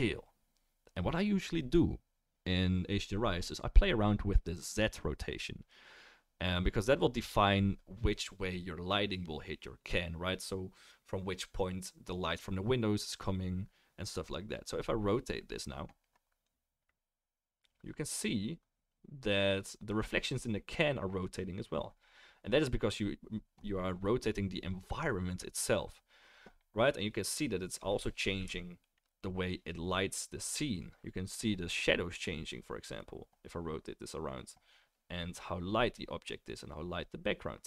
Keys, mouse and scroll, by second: 16.5-37.6 middle drag.